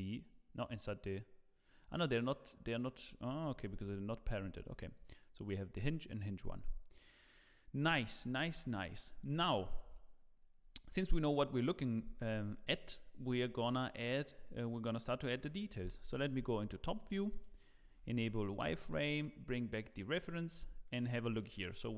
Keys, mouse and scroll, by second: 0.3-2.4 click, 3.7 click, 3.7 g, 4.6 click, 7.8 click, 8.3 scroll down 2, 8.6 shift+middle click, 15.8 KP_7, 16.5-17.0 scroll down 10, 17.1 shift+middle click, 17.9 z, 18.7 shift+middle click, 20.0 click, 20.4 scroll up 2, 20.8 shift+middle click, 21.4-21.8 scroll up 1.